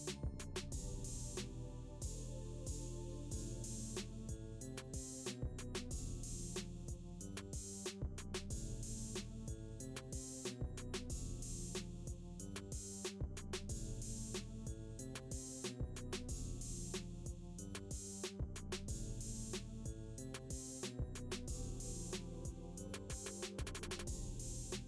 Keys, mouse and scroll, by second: 1.5 typing, 1.8-8.1 drag, 10.6-11.8 drag, 14.6 space, 18.1 space, 22.0 click, 23.4 scroll down 1.